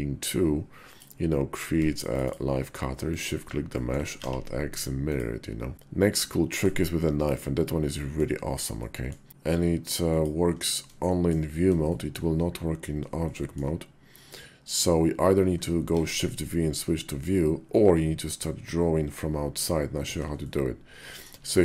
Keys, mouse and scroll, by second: 3.5 click, 3.6 middle click, 4.0 alt+x, 4.9 click, 6.0 shift+a, 7.0-7.8 drag, 7.8 middle click, 8.6-8.9 middle drag, 9.3 q, 10.8 shift+drag, 11.7 shift+click, 13.1 shift+click, 15.6 shift+v, 20.2-21.0 shift+drag.